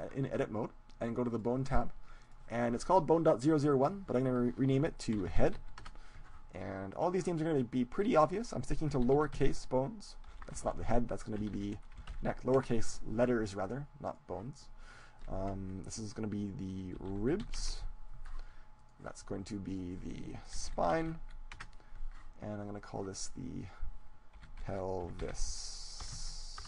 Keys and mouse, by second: 1.3-4.2 drag, 7.0-8.7 right drag, 7.9-9.9 drag, 14.0-15.9 right drag, 15.0-16.9 drag, 19.1-20.5 right drag, 19.7-21.5 drag, 20.5 middle click, 22.7-24.6 right drag, 23.7-25.5 drag, 23.7-24.8 middle drag.